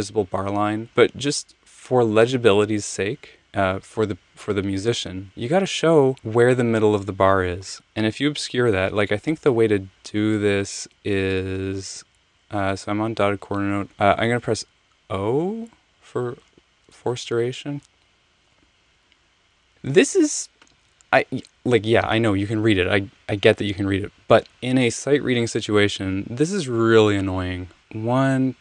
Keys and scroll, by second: 9.4 super+z, 10.3 super+z, 11.8 Right, 11.9 Right, 12.0 Right, 13.9 Left, 14.5 o, 18.6 f, 19.7 Return.